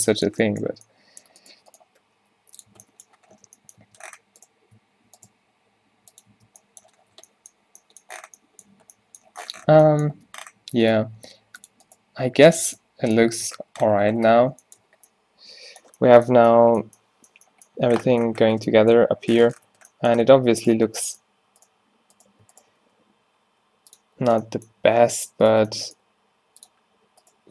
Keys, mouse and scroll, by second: 0.9 Tab, 2.1 g, 2.8 Tab, 4.4 Tab, 5.4 g, 6.4 Tab, 7.2 a, 10.2 Tab, 10.9-12.5 drag, 11.1 g, 12.0 g, 12.7 Tab, 13.6 Tab, 13.9 Tab, 14.4 a, 15.2 a, 19.8 Tab, 20.4 Tab, 20.8 Tab, 22.9 f, 23.5 g, 26.0-27.5 drag, 26.1 g.